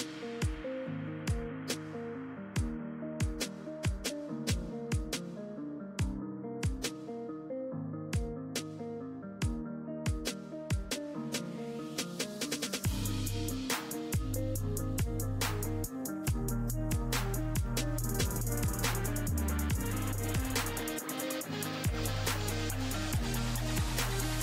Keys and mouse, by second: 3.0 z, 3.7 z, 6.0-8.4 drag, 9.3-12.2 drag, 9.8 z, 15.3 z, 18.9-24.4 drag, 19.4-24.4 right drag.